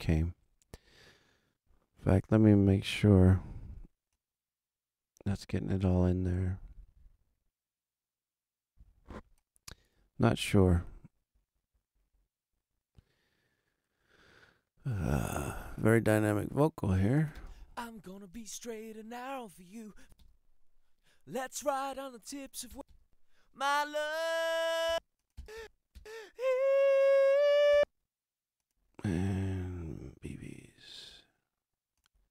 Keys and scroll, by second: 2.4 alt+a, 17.3 space, 19.9 space, 22.7 space, 24.8 space, 27.7 space.